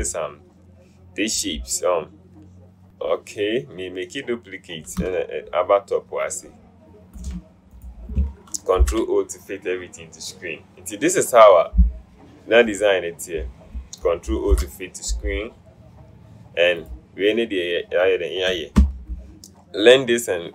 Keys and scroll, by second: 8.9 ctrl+0, 14.6 ctrl+0, 19.3 ctrl+h.